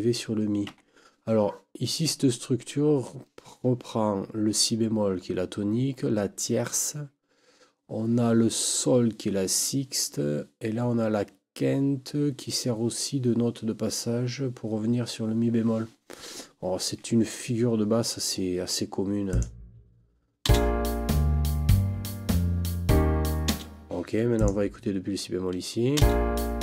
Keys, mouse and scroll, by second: 0.7 Escape, 19.3 click, 20.4 space, 23.5 space, 24.4 click, 26.0 space.